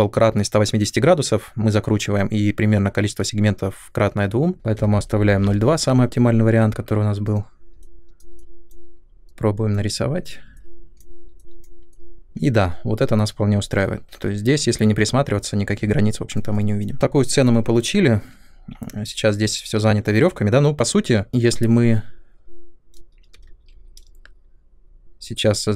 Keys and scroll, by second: 4.5-7.0 typing, 23.4 ctrl+z.